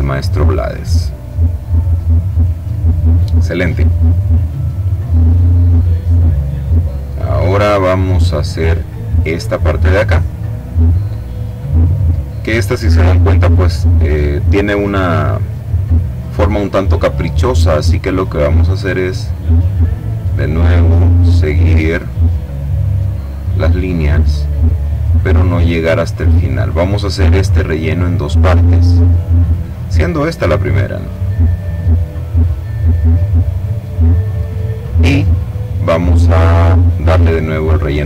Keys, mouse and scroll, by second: 0.6 click, 1.5-2.6 drag, 6.9 click, 8.8 click, 15.9 click, 18.5 click, 19.3 click, 20.2 click, 21.5 click, 22.2 click, 23.0 click, 23.9 click, 24.7 click, 25.9 click, 27.0 click, 27.9-29.1 drag, 29.2 click, 29.9 click, 30.6-31.7 drag, 31.8 click, 32.5 click, 33.2 click, 36.7 click.